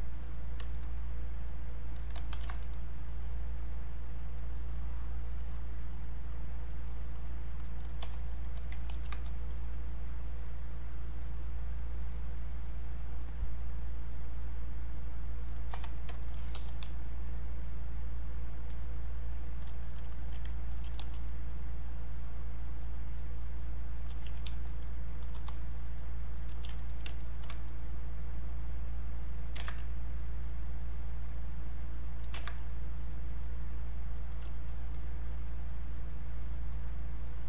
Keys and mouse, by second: 1.3 click, 2.3 ctrl+shift+1, 4.1 click, 8.9 ctrl+1, 9.5-11.7 drag, 11.7 click, 12.7-16.3 drag, 16.5 e, 17.2-19.5 drag, 20.7 alt+click, 21.0 e, 21.9-24.0 drag, 24.0 q, 24.7 alt+click, 25.3 r, 26.0 click, 26.5 q, 26.8 alt+click, 27.2 ctrl+right click, 28.2-29.6 drag, 29.6 ctrl+z, 29.8-32.3 drag, 32.3 ctrl+z, 33.1 click, 34.9-36.9 drag, 36.9 click.